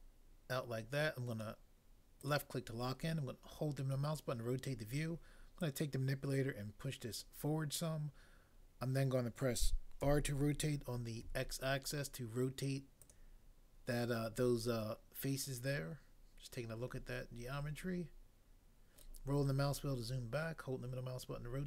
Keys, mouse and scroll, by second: 5.6 click, 10.1 r, 11.2 x, 13.1 click, 19.0 scroll down 1.